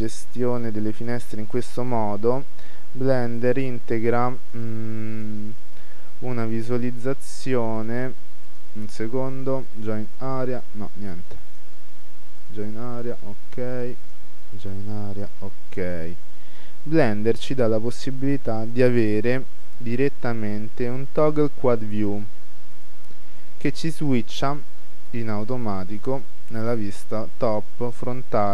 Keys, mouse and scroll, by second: 3.5-5.4 right drag, 8.5-15.9 right drag, 16.5-18.3 middle drag, 18.9-20.5 drag, 25.2-28.3 middle drag.